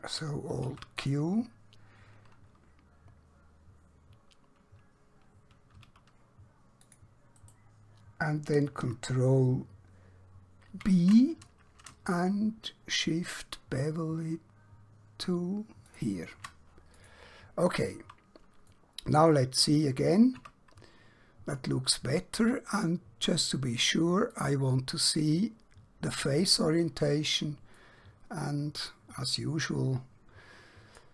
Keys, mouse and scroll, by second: 1.1 click, 5.5 alt+Num_Lock, 6.9 click, 7.5 right click, 15.9 shift+click, 16.9 click, 18.7 middle click, 20.5 Tab, 24.3 click, 27.9 middle click.